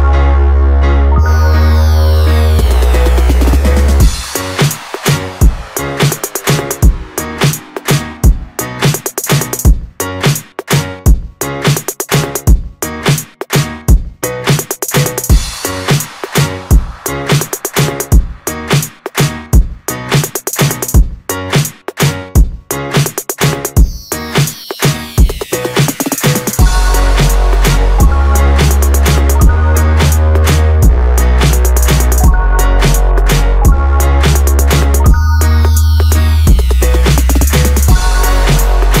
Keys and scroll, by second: 21.5 ctrl+d.